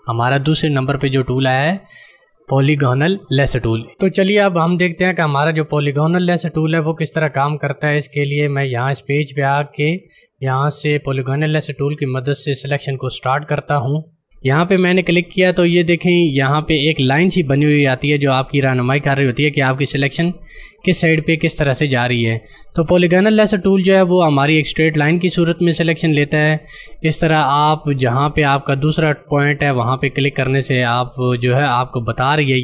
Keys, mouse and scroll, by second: 13.9 click, 29.9 click.